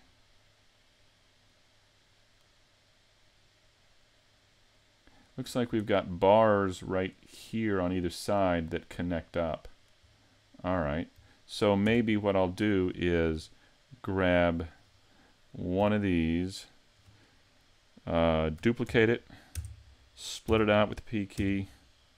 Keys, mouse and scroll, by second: 0.4 middle click, 5.1 right click, 5.5 scroll up 4, 5.9 shift+middle click, 6.6-7.2 scroll down 2, 7.2 middle click, 10.0 scroll down 2, 10.8-11.3 scroll up 1, 11.3 shift+middle click, 11.3 scroll up 1, 11.9 Tab, 12.2 middle click, 13.0 shift+middle click, 15.8 l, 18.9 shift+d, 20.5 p.